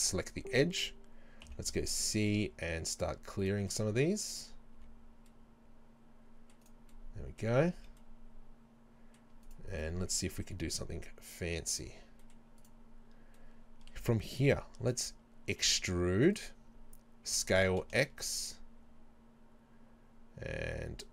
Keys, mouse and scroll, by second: 1.5 c, 3.5 right click, 3.7-6.7 middle drag, 4.8 c, 6.7 right click, 6.9-9.5 middle drag, 7.8 c, 9.5 right click, 9.8-12.7 middle drag, 10.6 c, 12.7 right click, 13.4-15.9 middle drag, 15.5 e, 16.5 right click, 17.3 s.